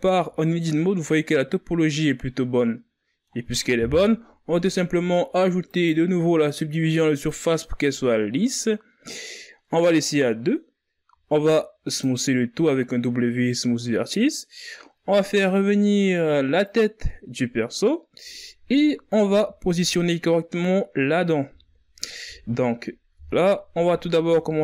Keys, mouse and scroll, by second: 0.1-0.7 scroll down 4, 0.7-3.5 middle drag, 3.5 KP_1, 4.1 Tab, 5.2-8.3 drag, 9.5-10.7 drag, 10.7 w, 16.2 click, 18.9 z, 21.1 z, 21.8 KP_3, 22.7 Tab, 23.4 KP_1, 23.8 z, 24.4 a.